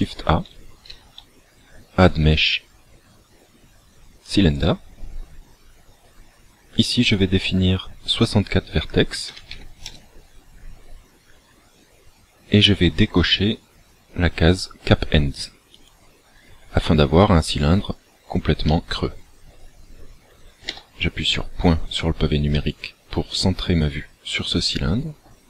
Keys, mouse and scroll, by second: 0.9 shift+a, 7.3 click, 11.3-12.2 scroll down 2, 12.2-12.7 scroll up 1, 15.9 click, 18.7 middle click, 20.8 KP_Decimal, 22.1 scroll down 1, 22.7 middle click.